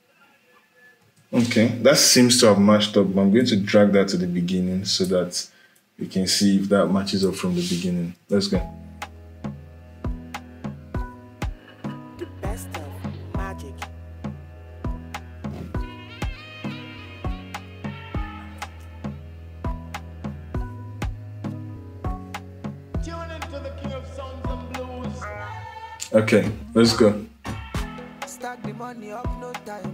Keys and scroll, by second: 0.7 space, 7.9 space.